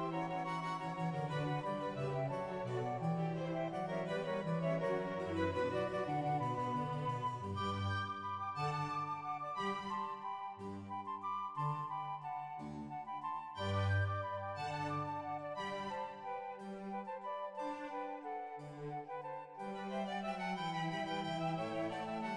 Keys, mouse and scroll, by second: 0.1 right click, 0.1 shift+g, 0.3 shift+middle click, 0.3 right click, 0.5 right click, 1.6-2.0 scroll down 1, 2.0 scroll down 1, 2.0 middle click, 2.8 Tab, 2.9-3.3 scroll up 1, 3.3 shift+middle click, 3.3-3.7 scroll down 2, 3.8 click, 4.1-5.2 typing, 4.3 right click, 4.3 scroll down 2, 4.9 click, 5.1 click, 5.2 right click, 5.8 shift+middle click, 5.8-6.2 scroll up 3, 6.2 scroll down 2, 6.4-9.1 scroll up 1, 6.4 e, 9.1 click, 9.1 right click, 9.3 shift+g, 12.2 shift+middle click, 12.2 scroll up 1, 12.2 e, 12.4 click, 13.3 click, 13.3 right click, 13.3 g, 13.5-15.6 scroll down 2, 15.6 scroll up 3, 15.9 shift+click, 15.9 g, 17.2 e, 17.6 click, 19.2 shift+middle click, 19.2 scroll down 2, 19.6 scroll down 2, 20.6 right click, 20.6 g, 21.2 middle click, 21.2-21.8 scroll down 2, 21.8 ctrl+s, 21.8-22.3 scroll down 1, 22.3 shift+middle click.